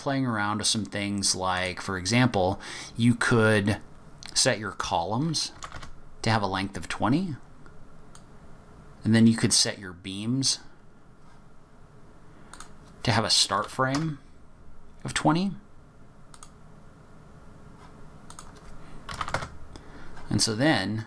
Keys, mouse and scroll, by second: 1.5 click, 3.9 click, 8.1 click, 10.4 click, 12.5 click, 16.3 click, 18.3 click.